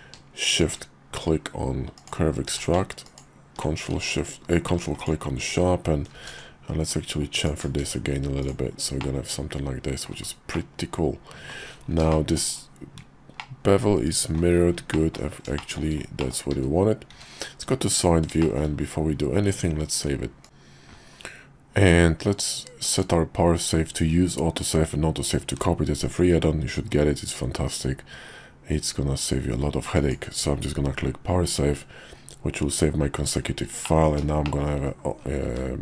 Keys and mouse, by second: 2.5 q, 3.9 Tab, 5.0 click, 6.1 ctrl+b, 7.8 Tab, 8.4 click, 9.0-10.0 middle drag, 10.5-11.5 middle drag, 12.1 shift+middle click, 13.4-14.4 middle drag, 14.9 middle click, 15.6 shift+middle click, 16.2 middle click, 16.5 `, 17.1 `, 17.7 KP_5, 18.4 shift+middle click, 22.8-31.5 drag, 33.8 middle click, 34.4 shift+middle click, 34.9 KP_5, 35.4 `.